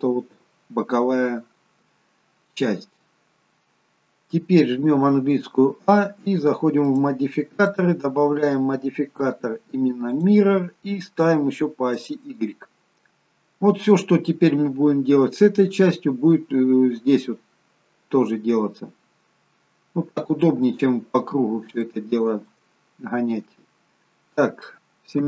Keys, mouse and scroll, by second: 5.1 a, 6.9 click, 7.8 click, 12.2 click, 19.2-20.2 scroll up 3, 20.2 shift+middle click, 22.6 shift+middle click.